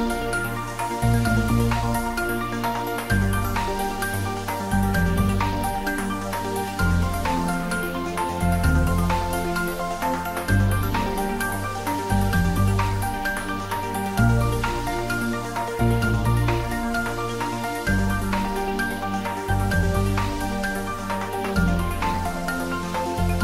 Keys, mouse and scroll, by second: 0.2 alt+n, 1.4 middle click, 2.4 ctrl+m, 3.0 click, 3.3 ctrl+z, 3.9 click, 6.1 s, 7.0 click, 7.2 ctrl+z, 7.8 click, 8.6 s, 9.7-10.4 typing, 10.8 click, 11.1 ctrl+middle click, 11.8-14.1 shift+middle drag, 14.1 s, 15.2-15.9 typing, 15.6 click, 16.7-17.8 shift+middle drag, 17.8 ctrl+r, 18.1 click, 19.4 s, 21.5 click, 21.8 shift+middle click, 22.2 s.